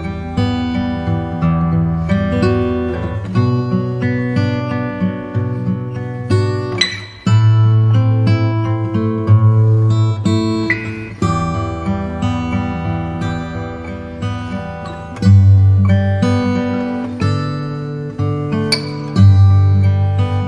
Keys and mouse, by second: 7.0 s, 12.9 KP_7, 15.9 s.